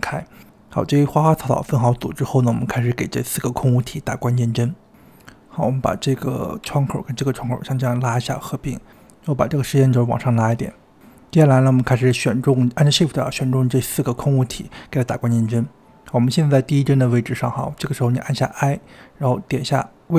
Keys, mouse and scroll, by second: 0.1 click, 1.8 shift+click, 2.9 ctrl+p, 4.2 click, 4.4 click, 5.0 g, 5.2-14.9 drag, 15.4-18.4 shift+drag, 18.4 i.